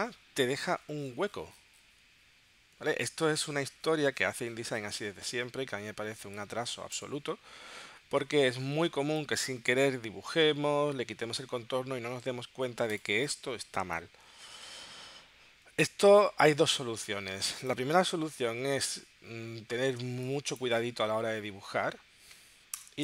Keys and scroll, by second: 6.2 space, 8.9 space, 17.3 space, 18.9 super+z, 20.0 space, 22.7 BackSpace.